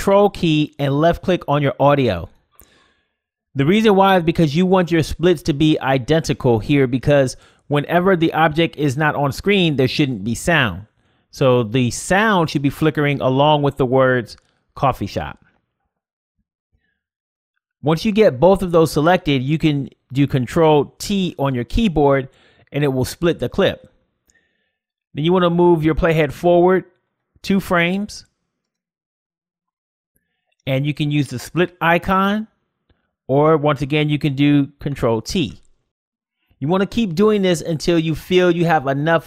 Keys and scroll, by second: 16.1 ctrl+t, 33.0 ctrl+t.